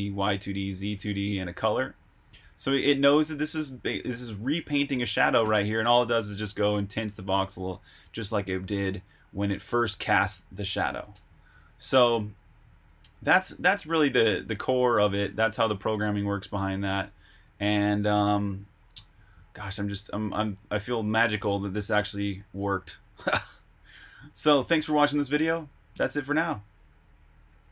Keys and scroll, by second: 1.2 j, 2.4 k, 2.9 shift+v, 5.4 Escape, 5.5 j, 5.9 shift+v, 9.7 Escape, 12.6-13.5 typing, 14.0 super+Tab.